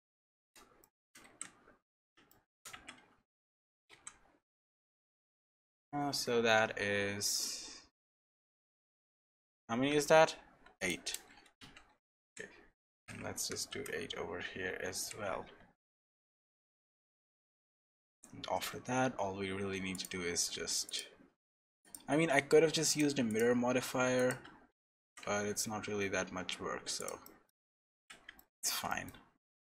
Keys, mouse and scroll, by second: 0.0 shift+middle click, 0.8 middle click, 1.2 ctrl+r, 2.3 shift+middle click, 2.7 Tab, 3.4 middle click, 3.9 ctrl+r, 12.2 ctrl+r, 15.9-16.3 scroll down 1, 16.4 middle click, 17.1 shift+middle click, 17.6 3, 17.9 middle click, 18.6-19.4 scroll up 2, 19.9 click, 19.9 scroll down 1, 20.8 shift+click, 22.3 scroll up 1, 22.9 shift+click, 24.5-25.1 scroll down 3, 25.1 e, 27.2 middle click, 27.8 scroll up 2, 27.9 Tab, 28.3 shift+middle click, 28.9 middle click, 29.3 scroll down 2.